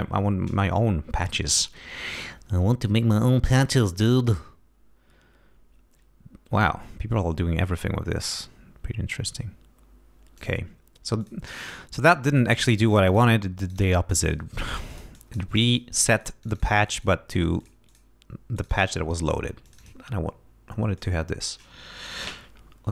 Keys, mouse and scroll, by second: 0.9-1.5 scroll up 2, 3.0-3.5 scroll up 2, 8.9-9.4 scroll up 2, 10.4 click, 11.2 click, 12.3 click, 12.9 click, 13.6 click, 14.1 click, 14.9 click, 16.0 click, 17.6 click, 17.9 click, 18.6 click, 19.7 click, 21.0 click.